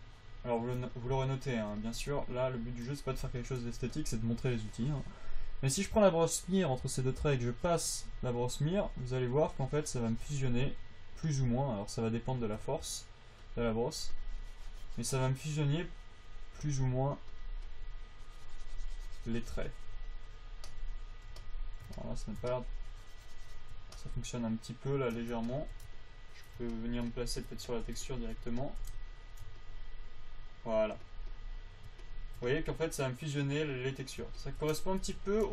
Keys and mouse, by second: 2.9 click, 3.5 click, 5.8 f, 10.9 f, 12.7 shift+f, 17.2 f, 21.5 click, 21.9 middle click, 22.4 click, 22.5 middle click, 22.6-24.4 drag, 30.0-31.4 drag, 31.4 f, 34.5-35.5 drag.